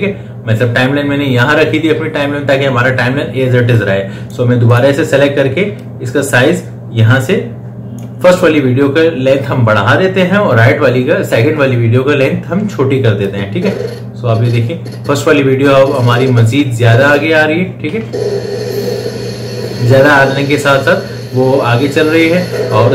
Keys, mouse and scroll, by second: 4.0-10.9 drag, 13.5-18.3 drag, 18.3 space.